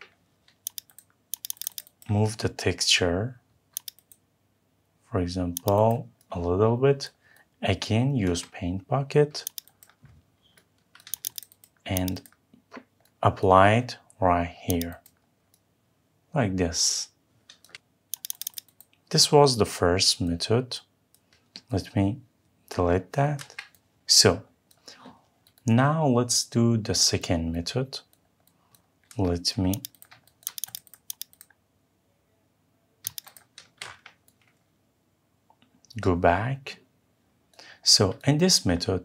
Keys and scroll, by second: 17.5 Escape, 23.1 Delete, 33.5 Escape.